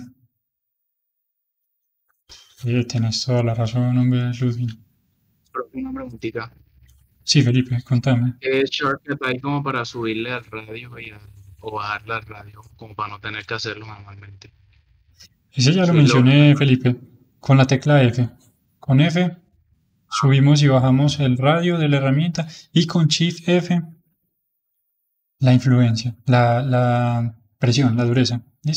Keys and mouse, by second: 0.0-2.8 middle drag, 5.1-11.9 middle drag, 12.0-16.5 ctrl+middle drag, 17.6 f, 24.0 shift+f.